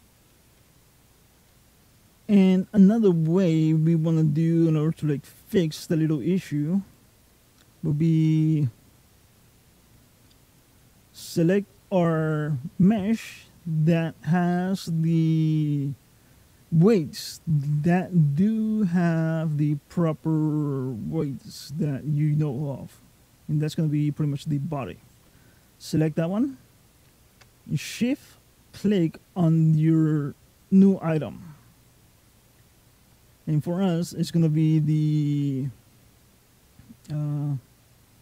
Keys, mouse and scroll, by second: 2.4 click, 6.6 click, 8.8 click, 10.3 click, 25.4 click, 30.1 shift+click.